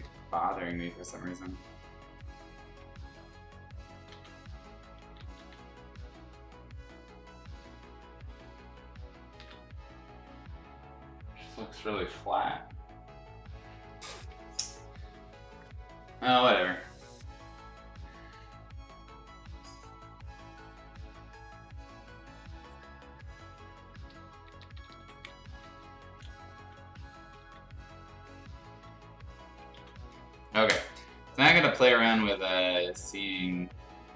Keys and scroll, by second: 0.0 ctrl+z, 4.1 x, 5.1 ctrl+z, 5.3 ctrl+z, 9.3 ctrl+z, 14.6 ], 14.8 ], 16.1 ctrl+z, 24.3-26.6 typing, 27.4 ctrl+z, 28.9 ctrl+z, 29.6 ctrl+z.